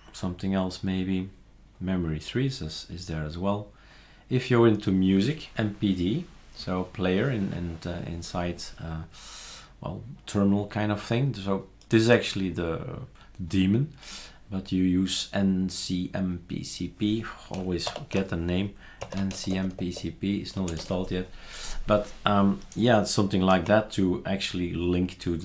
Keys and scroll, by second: 17.9 ctrl+alt+t, 18.8-20.9 typing, 19.9 Tab, 23.5 super+q.